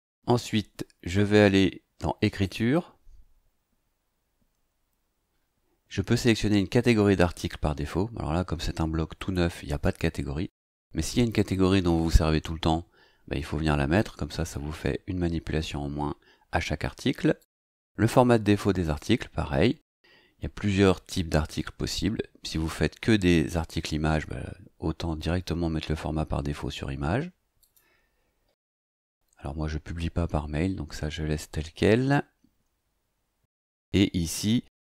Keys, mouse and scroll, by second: 2.4 click, 9.7 click, 17.4 click, 18.8 click, 27.6 click, 28.8-31.9 scroll down 2, 31.9-32.3 scroll down 1.